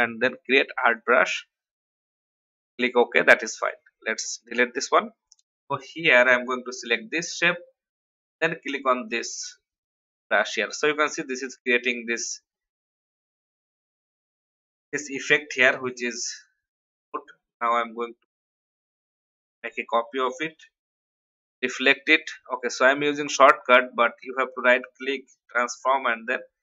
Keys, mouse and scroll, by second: 4.5 Delete, 6.6 click, 12.8-13.3 scroll down 1, 13.8 click, 17.6-19.2 alt+drag, 20.5 ctrl+r, 23.3 click, 24.2 right click.